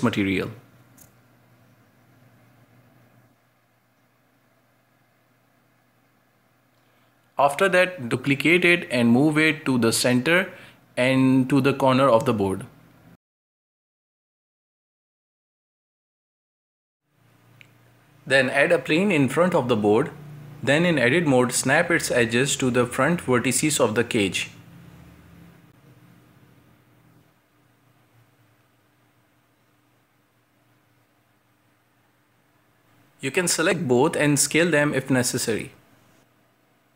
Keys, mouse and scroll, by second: 0.2 drag, 1.3 scroll down 3, 1.5 middle click, 2.2 g, 3.0 shift+Tab, 3.3 g, 4.8 alt+d, 6.7 g, 7.8 scroll down 1, 8.0 shift+middle click, 8.7 scroll down 1, 8.8 g, 9.8 alt+d, 11.3-11.7 scroll up 2, 11.7 right click, 12.6 scroll down 3, 12.8-15.0 middle drag, 15.0 right click, 15.7-16.4 middle drag, 16.4 shift+s, 16.9-18.0 middle drag, 18.0 shift+a, 19.5-20.2 middle drag, 20.2-21.0 scroll up 1, 21.0 Tab, 21.7-22.2 scroll down 1, 22.2 right click, 22.4 middle click, 23.3 click, 23.4 shift+middle click, 23.7 scroll up 1, 23.9 g, 24.3 right click, 24.4 shift+middle click, 24.5 scroll down 1, 24.6 g, 25.5 right click, 25.7-27.8 typing, 26.0 right click, 26.5 middle click, 27.1 right click, 27.5 shift+middle click, 27.7 right click, 28.3 shift+middle click, 28.6 scroll up 1, 28.9 right click, 29.2 shift+middle click, 29.4 scroll up 1, 29.6 right click, 29.8 g, 30.4 scroll down 4, 30.5 middle click, 30.7 middle click, 31.0 scroll up 2, 31.1 shift+middle click, 31.6 scroll down 1, 31.7 middle click, 32.3 Tab, 32.6 shift+right click, 32.8 g, 34.1 g, 34.4 middle click, 35.0 g, 36.0-36.9 middle drag, 36.9 scroll up 1.